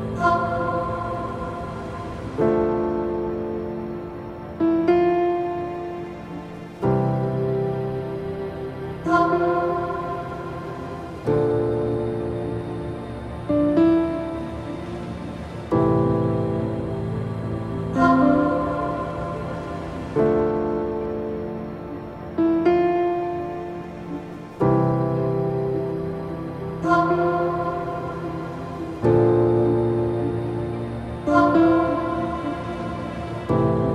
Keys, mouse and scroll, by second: 0.0-4.9 drag, 5.4 click, 7.1-10.2 drag, 11.5-25.5 drag, 25.5-28.4 shift+middle drag, 28.4-31.5 drag.